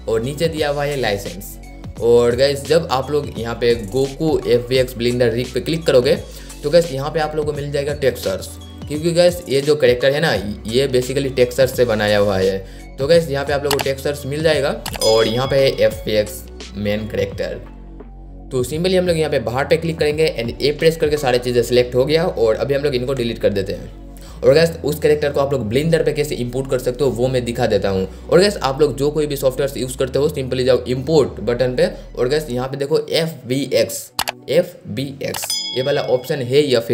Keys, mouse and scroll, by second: 19.0 click, 20.9 a, 23.2 Delete, 28.8-36.9 drag.